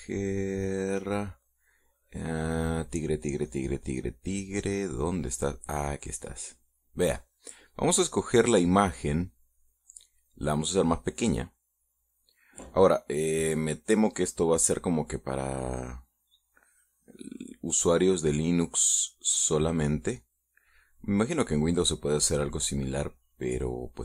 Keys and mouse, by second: 0.8-6.0 drag, 6.8 click, 8.9 click, 10.3-11.6 drag, 16.7-19.1 drag, 21.8 click.